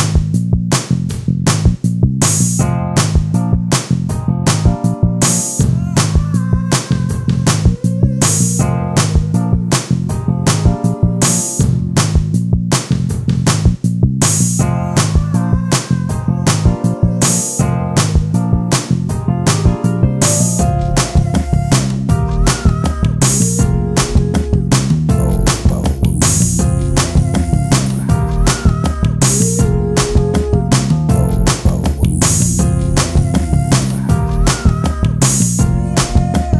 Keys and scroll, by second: 0.3 ctrl+space, 3.5 e.